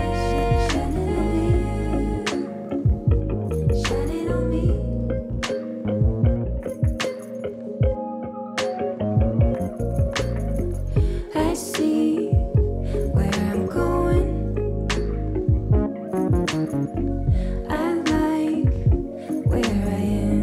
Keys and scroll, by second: 20.1 ctrl+z.